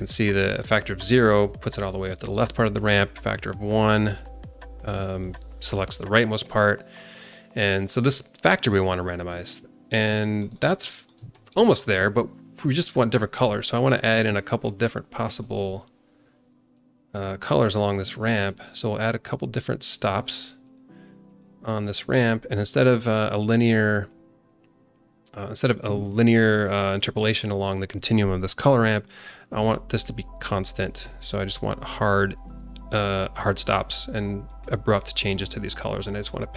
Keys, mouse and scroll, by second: 3.1 click, 5.2 click, 6.4-10.1 drag, 10.4-11.0 scroll up 3, 11.0 scroll down 1, 11.3 alt+shift+middle click, 12.7 click, 14.1 click, 14.6 click, 16.7-17.1 drag, 17.7-18.2 drag, 18.8 click, 19.7 click, 20.6 click, 21.2 click, 22.0 click, 26.9-30.5 drag, 34.4 click, 34.9 scroll up 2, 36.2 click.